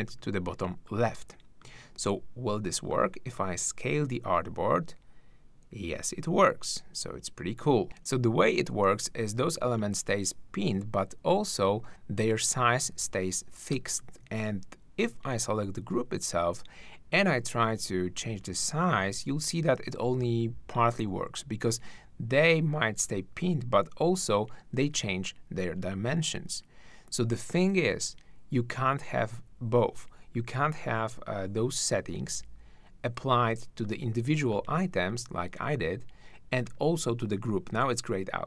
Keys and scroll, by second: 24.8 super+z.